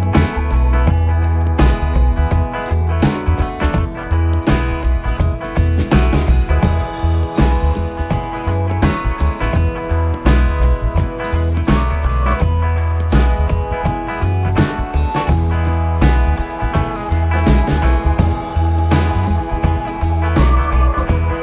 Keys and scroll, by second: 0.2 Down, 2.1 Down, 3.0 Up, 5.7 Left, 6.8 ctrl+=, 7.8 Left, 10.0 Left, 12.1 Left, 14.9 Left, 16.0 ctrl+-, 16.4 space, 17.0 ctrl+-, 19.3 Right, 19.6 Left, 20.2 Right, 20.6 Right.